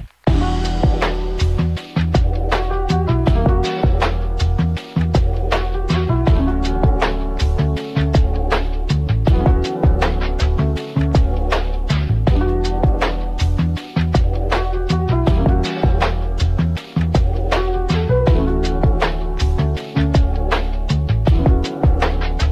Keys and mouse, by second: 0.2 Tab, 0.2 middle click, 0.8 middle click, 1.3 middle click, 2.0 middle click, 2.5 middle click, 3.0 middle click, 3.3 middle click, 3.7 middle click, 4.1 middle click, 4.5 middle click, 4.8 middle click, 5.4 shift+middle click, 6.2-9.6 middle drag, 12.3 x, 14.3-15.7 drag, 15.9 shift+a, 19.0 Tab, 19.4 middle click, 20.9 r, 21.3 x, 22.2 9, 22.4 0.